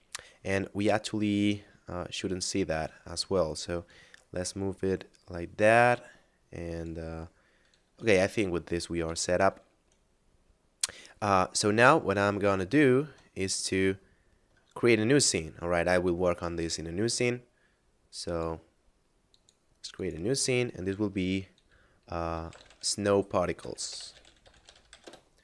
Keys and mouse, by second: 2.7 right click, 3.7 click, 9.0 Tab, 11.4 middle click, 12.7 shift+middle click, 14.1 shift+middle click, 18.2 click, 22.3 s, 22.6 o, 22.7 w, 23.9 p, 24.0 a, 24.2 r, 24.3 t, 25.1 Return.